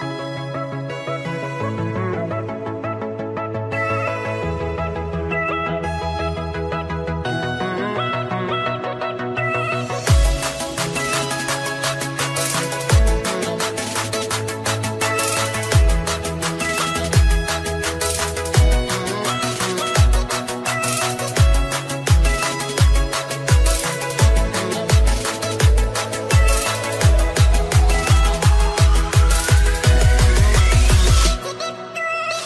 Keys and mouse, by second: 0.3 ctrl+v, 0.3 ctrl+c, 0.3 click, 0.8 u, 2.1 click, 9.5 click, 10.8 ctrl+a, 11.4 click, 12.5 ctrl+a, 12.5 click, 12.7 ctrl+a, 12.7 click, 13.5 ctrl+y, 15.6 ctrl+y, 15.6 click, 16.6 click, 17.4 ctrl+y, 17.4 click, 18.2 click, 18.8-20.0 typing, 19.1 click, 21.7-24.2 typing, 21.9 click, 23.0 click, 25.9 click, 26.9 click, 27.9-29.6 typing, 28.6 click, 31.7-32.4 typing, 31.9 click.